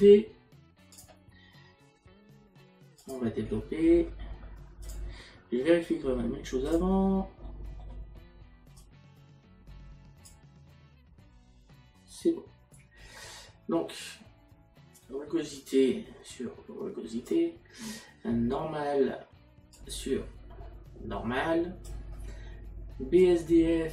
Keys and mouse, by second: 3.0 click, 6.7 click, 8.8 click, 15.0 click, 19.8 click, 23.2 click.